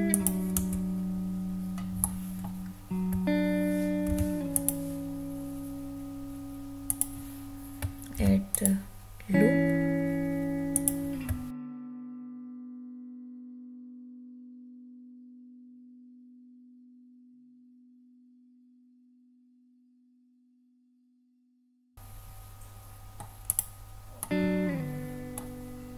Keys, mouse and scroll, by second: 0.1 click, 0.6 Tab, 2.0 middle click, 4.1 ctrl+r, 6.9 click, 8.2 ctrl+r, 10.7 click, 11.6 ctrl+r, 12.3 click, 12.8 ctrl+r, 13.4 click, 14.2 ctrl+r, 14.9 click, 15.1 middle click, 15.1 scroll down 1, 15.8 ctrl+r, 16.3 click, 16.4 middle click, 16.9-17.2 scroll up 4, 17.2 shift+middle click, 17.8 ctrl+r, 18.4 click, 18.6 middle click, 18.9 Tab, 19.0 scroll down 2, 19.2-19.6 middle drag, 19.8 click, 20.0 Tab, 20.2-20.7 scroll up 4, 20.7 ctrl+r, 21.5 click, 21.7 Tab, 21.9-23.2 middle drag, 21.9 right click, 23.4 click, 24.2-25.4 middle drag.